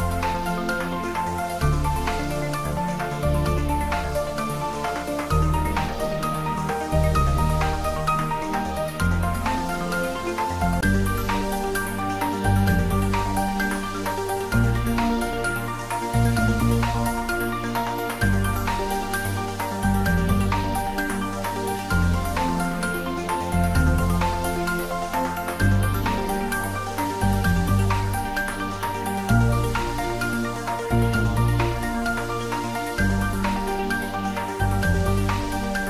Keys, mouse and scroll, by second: 0.4 shift+click, 2.2 scroll up 1, 3.9 shift+click, 4.4 scroll down 1, 6.0 shift+click, 6.7 shift+click, 7.4 scroll up 1, 8.7-10.9 drag, 10.9-14.7 drag, 18.6-19.1 scroll down 2, 19.1-20.3 middle drag, 20.3-21.4 scroll up 1, 21.4-23.0 middle drag, 22.8-23.9 typing, 30.2 click, 30.5 scroll down 1, 32.1 g, 32.7 z, 35.0 z.